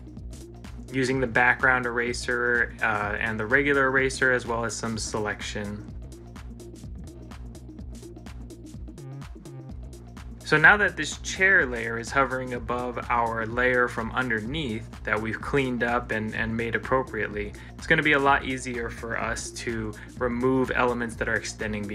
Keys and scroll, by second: 1.7 ctrl+z, 4.0 ctrl+z, 9.0 ctrl+s, 10.9 ctrl+s, 14.0 ctrl+c, 14.5 ctrl+l.